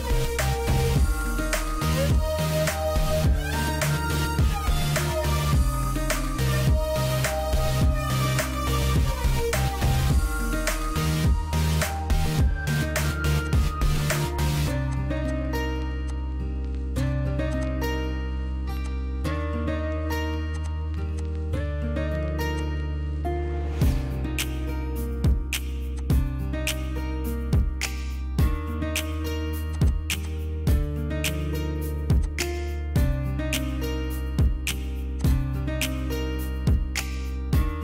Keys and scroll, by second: 3.2 Escape, 5.3 Escape, 5.6 Escape, 7.0 h, 17.1 ctrl+x, 21.7 ctrl+shift+n, 21.7-24.2 typing, 24.4 Return, 25.3 p, 26.5-28.2 typing, 31.4 m, 32.9-36.2 typing.